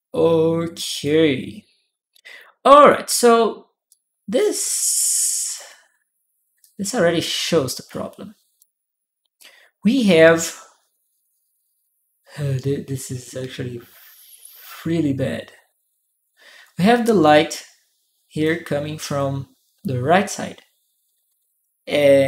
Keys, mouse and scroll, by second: 0.8-2.7 drag, 3.7-5.3 drag, 6.4-8.4 drag, 9.1-18.2 drag.